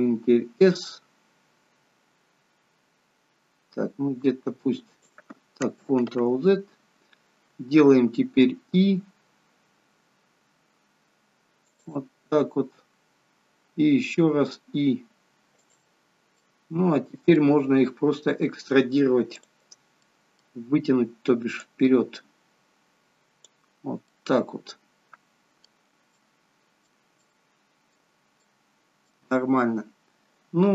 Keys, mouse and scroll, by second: 0.4 s, 6.0 ctrl+z, 8.6 i, 12.2-12.6 scroll up 3, 14.2 i, 16.1 scroll down 3, 16.4 middle click, 19.4 click, 20.1 middle click, 21.6 click, 24.1 middle click, 26.1 shift+middle click, 28.4 middle click.